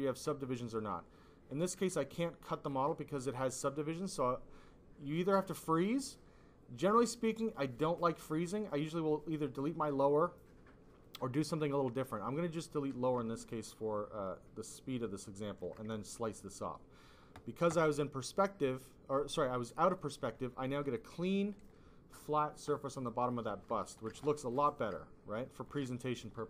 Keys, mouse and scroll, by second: 2.2 ctrl+click, 3.3 click, 3.8 click, 11.0 click, 12.2 click, 13.3 ctrl+click, 19.9 click, 22.7 click, 23.4 click, 24.4 alt+click, 24.6 alt+click, 24.9 click.